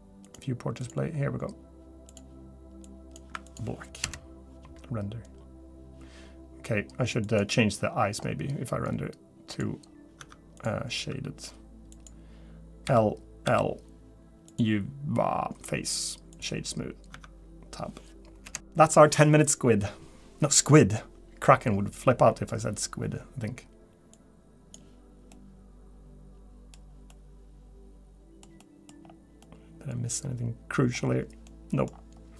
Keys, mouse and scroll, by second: 9.5 click, 9.5-10.2 scroll up 7, 10.2 Tab, 10.6 click, 11.0 Tab, 11.9 click, 12.8 l, 13.4 l, 14.5 click, 17.1 Tab, 18.4 scroll down 1, 25.3 middle click, 26.7-27.2 scroll down 3, 27.1 middle click, 28.6 middle click, 29.0-29.4 scroll down 2, 29.4 middle click, 31.0-32.0 scroll up 8, 31.5 middle click.